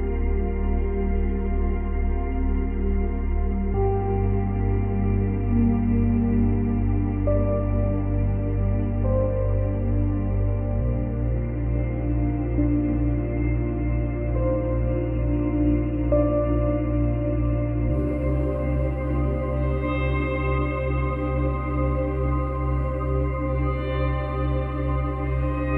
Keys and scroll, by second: 17.7 space, 20.4 space, 22.5 space.